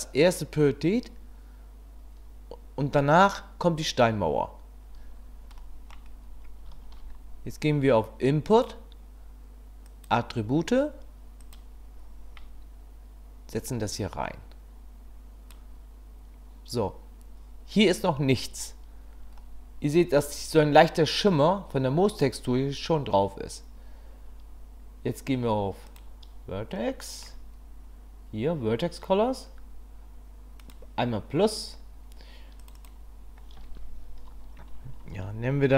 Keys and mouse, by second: 5.7 click, 6.8 shift+a, 13.6-15.5 drag, 19.4-20.2 middle drag, 25.9 click, 26.9 middle click, 30.7-32.7 drag, 32.8-35.7 drag.